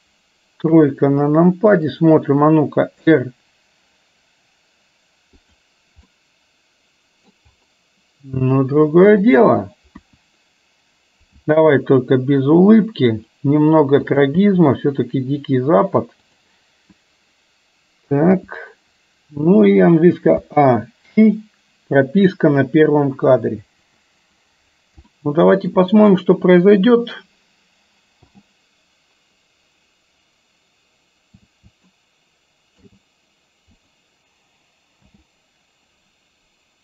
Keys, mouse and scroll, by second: 0.8 KP_3, 3.1 r, 6.1-7.4 middle drag, 9.3 click, 10.0 KP_1, 11.9 g, 14.6 g, 18.3 KP_1, 20.5 a, 21.3 i, 25.1-25.8 shift+middle drag, 28.4 n, 32.0-33.0 shift+middle drag, 35.1 space.